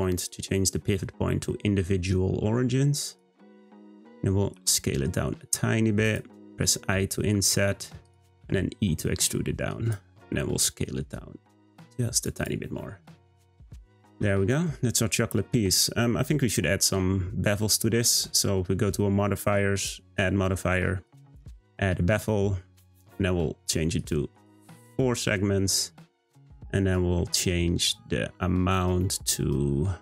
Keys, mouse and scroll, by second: 4.5 s, 6.8 i, 8.4 e, 10.3 s, 12.3 click, 13.1-13.5 scroll down 1, 13.5 Tab, 13.8-14.1 scroll up 2, 14.7-17.7 middle drag, 19.7-21.9 drag, 21.9 middle click, 22.2-23.7 scroll down 1, 23.7 scroll down 1, 23.9-25.2 drag, 25.2 scroll up 2, 26.5-29.5 drag.